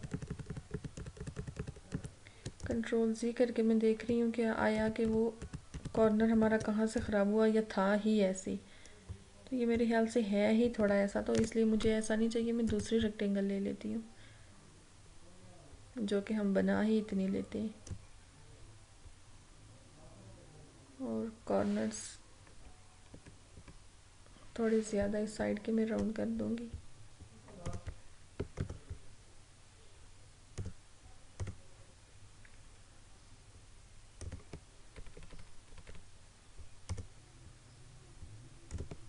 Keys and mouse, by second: 2.7 click, 4.9 ctrl+z, 7.1-12.3 drag, 12.8 click, 18.0-22.6 drag, 22.6 Down, 27.7 click, 27.8 click, 28.7 right click, 30.7 click, 34.4 click, 35.0 Left, 37.0 click.